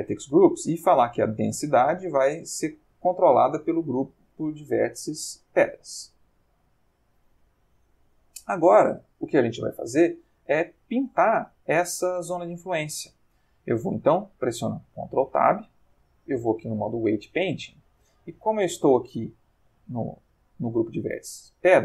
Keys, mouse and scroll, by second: 0.0 click, 0.6 middle click, 1.7 click, 2.3 click, 4.4 ctrl+middle click, 5.3 ctrl+shift+middle click, 6.3 ctrl+shift+middle click, 7.5 middle click, 15.2 ctrl+Tab, 16.9 click, 19.0 click.